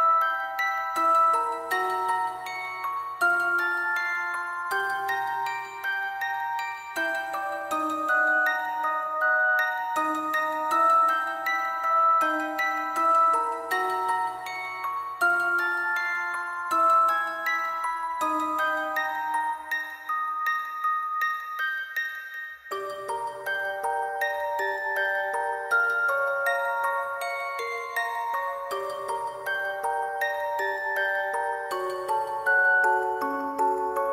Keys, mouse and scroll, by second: 0.2 ctrl+click, 0.3 alt+click, 0.4 shift+click, 0.9 shift+click, 2.9 alt+click, 3.1 alt+click, 3.4 alt+click, 4.1 typing, 4.8 double click, 5.8 double click, 6.7 double click, 7.3 double click, 7.9 double click, 8.4 alt+click, 9.1 ctrl+click, 9.2 shift+click, 10.6 double click, 11.7 alt+click, 12.1 double click, 13.2 shift+click, 13.3 ctrl+click, 13.5 shift+click, 13.8 shift+click, 14.0 alt+click, 14.1 alt+click, 14.4 shift+click, 14.8 alt+click, 14.9 alt+click, 15.1 alt+click, 15.3 alt+click, 15.7 alt+click, 16.3 alt+click, 16.7 alt+click, 18.3 ctrl+click, 18.5 shift+click, 18.9 alt+click, 19.1 shift+click, 19.6 alt+click, 19.7 alt+click, 20.5 ctrl+click, 21.1 alt+click, 21.7 ctrl+click, 22.1 alt+click, 24.1 alt+click, 24.5 ], 25.0 shift+click, 30.9 alt+click, 32.1 alt+click, 32.4 alt+click, 32.9 alt+click, 32.9 shift+click, 33.0 alt+click, 33.3 alt+click, 33.6 alt+click, 33.7 alt+click.